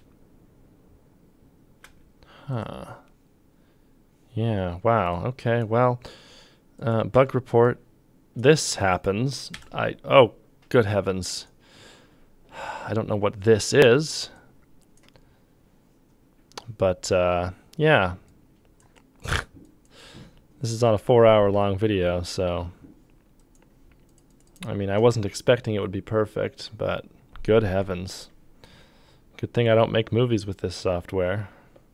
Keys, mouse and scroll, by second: 1.8 space, 7.2 f, 9.5 m.